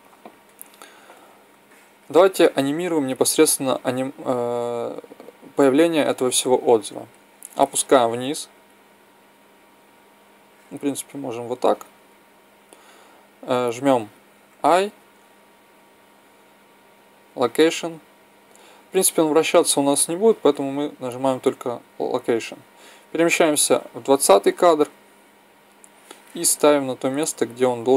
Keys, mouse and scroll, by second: 7.0-8.9 drag, 14.5 i, 23.6 click, 25.9-27.9 drag.